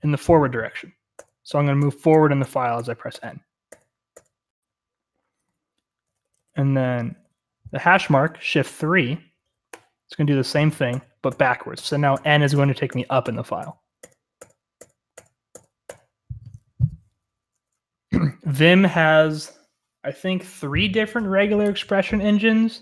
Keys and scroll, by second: 1.1-3.6 typing, 5.0-7.0 typing, 9.7 shift+3, 10.8-15.8 typing.